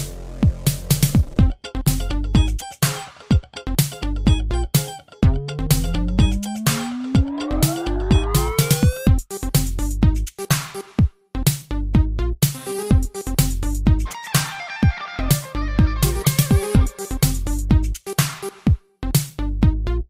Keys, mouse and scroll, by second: 0.3 click, 4.6 r, 5.5 click, 5.6 click, 6.4 click, 7.8 ctrl+z, 8.7 click, 16.5 r, 17.4 click, 17.5 click, 19.1 click.